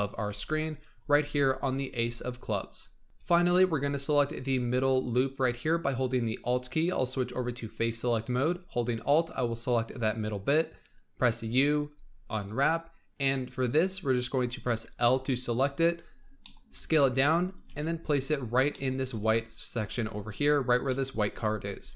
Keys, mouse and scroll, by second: 0.2 g, 0.9 scroll up 3, 1.1 s, 1.9 g, 3.0-5.1 scroll up 1, 7.2 click, 9.4 alt+click, 11.3 u, 13.0 scroll down 3, 15.0 l, 15.8-16.3 scroll down 8, 16.3 middle click, 16.6 d, 17.6 s, 18.4-19.0 scroll up 5, 18.6 middle click, 19.0 s, 19.7 g, 20.5-21.2 scroll up 4, 20.8 middle click, 21.2 s, 21.7 g.